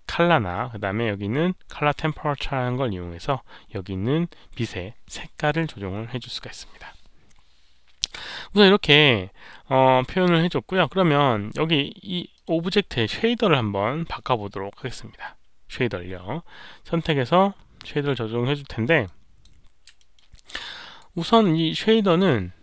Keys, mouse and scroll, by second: 8.4-8.7 scroll down 1, 9.5-10.4 scroll down 2, 10.7 scroll down 1, 12.3 click, 19.0 click, 19.9 alt+middle drag, 20.3 alt+drag, 20.7 alt+right click, 21.2 alt+middle drag, 21.5 alt+right drag, 21.9 alt+middle drag.